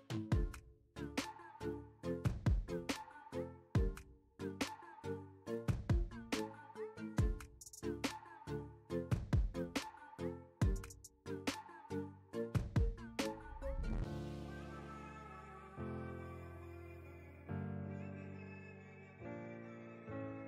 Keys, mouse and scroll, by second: 1.2 right click, 3.4 click, 4.8-6.0 typing, 6.8 ctrl+a, 7.1 ctrl+c, 7.5 Tab, 8.2 ctrl+a, 8.5 ctrl+v, 9.4 Return, 10.6 click, 14.3-19.6 drag.